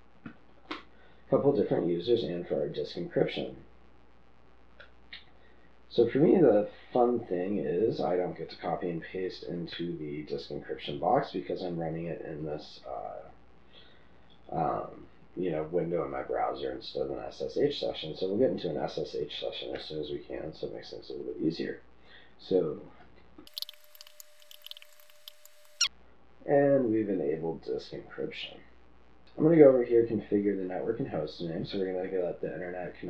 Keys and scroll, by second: 0.0-1.9 typing, 23.4-26.7 typing.